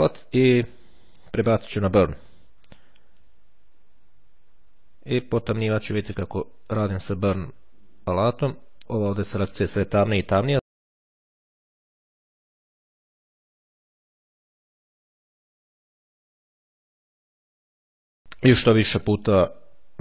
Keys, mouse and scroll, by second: 1.8 click, 3.3-6.7 drag, 6.8-10.3 drag, 10.4-13.5 drag, 13.7-16.3 drag, 17.3-19.9 drag.